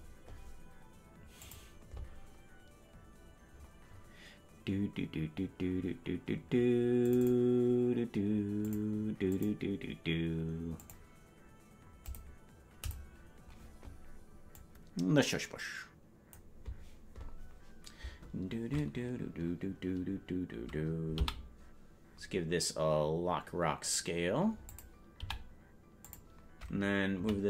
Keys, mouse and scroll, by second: 27.3 Right, 27.3 i.